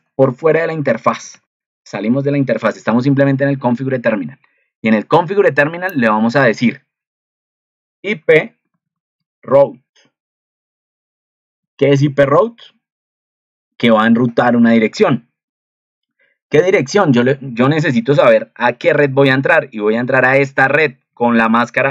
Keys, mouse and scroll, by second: 18.6 ctrl+2.